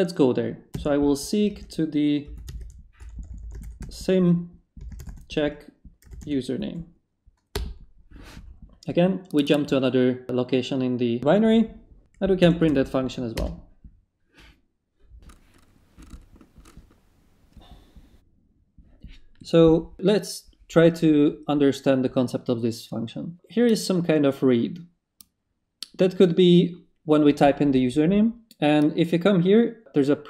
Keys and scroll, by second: 0.7-6.0 typing, 6.1 Tab, 7.5 Return, 12.1-13.0 typing, 13.3 Return.